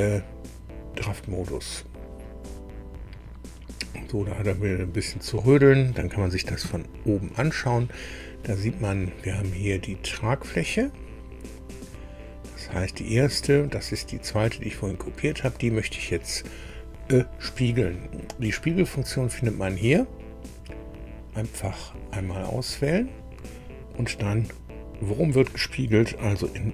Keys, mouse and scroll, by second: 1.4 click, 6.6 KP_2, 9.5-9.8 scroll down 1, 10.9 scroll down 1, 11.6 click, 13.6 click, 21.6 click.